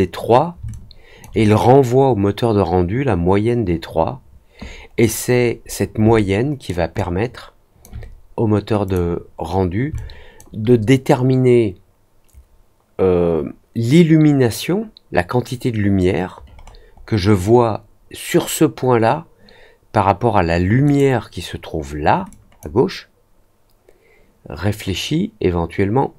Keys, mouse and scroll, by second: 0.6 alt+click, 4.8-5.8 scroll down 3, 6.1 alt+middle click, 6.9 alt+click, 8.8 click, 9.9 alt+click, 16.5 middle click, 16.9 middle click, 20.8 click, 22.2 click.